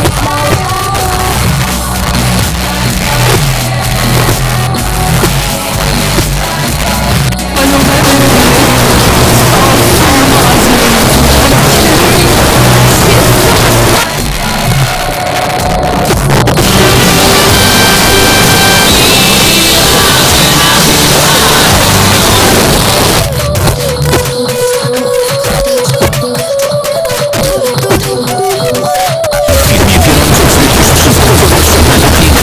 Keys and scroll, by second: 13.5 Page_Down, 22.6 Page_Down.